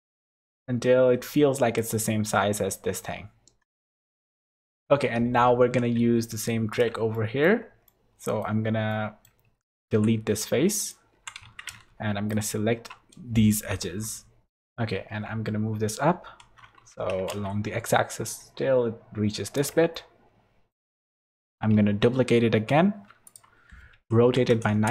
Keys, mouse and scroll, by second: 4.6 KP_7, 6.0 e, 7.1 shift+middle click, 7.9 middle click, 8.9 middle click, 9.9 x, 11.1 2, 11.4 alt+a, 12.3 alt+shift+click, 13.9 KP_7, 14.6 scroll down 1, 15.0 shift+d, 19.9 shift+middle click, 21.7 shift+d, 23.9 r.